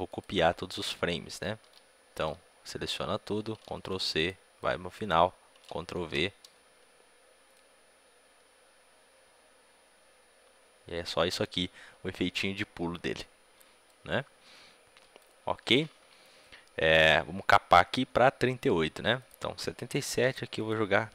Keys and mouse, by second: 1.5 a, 2.0 a, 4.1 ctrl+c, 4.1-9.4 drag, 5.6 ctrl+v, 13.8-21.1 drag.